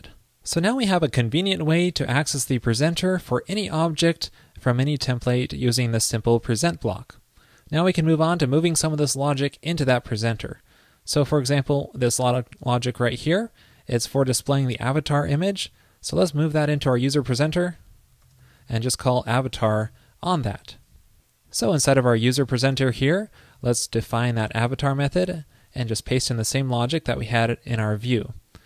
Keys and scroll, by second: 15.8 super+x, 20.6 super+Right, 20.6 super+s, 26.2 super+v, 27.1 super+Left.